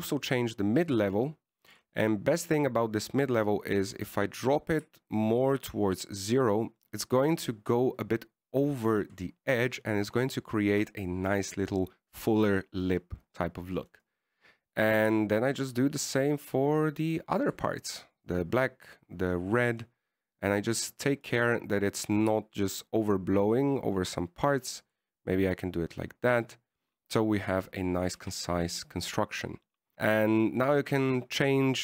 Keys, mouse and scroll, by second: 0.9 click, 3.5-3.8 scroll up 2, 5.1 click, 14.5 scroll down 1, 15.3 right click, 16.4 click, 19.5 right click, 21.3-22.5 scroll up 10, 22.5 scroll up 3, 22.6 click, 23.6 click, 26.8 click, 29.1 scroll down 1, 29.5 a, 30.7-31.4 scroll down 2, 31.4 right click.